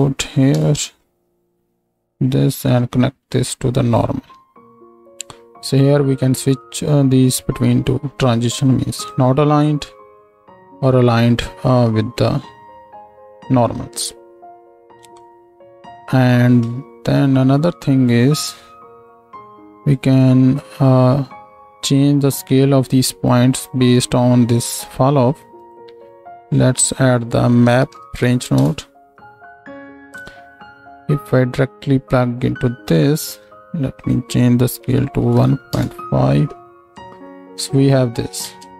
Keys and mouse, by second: 1.4 click, 25.8 click, 30.1-31.8 drag, 38.4 ctrl+space.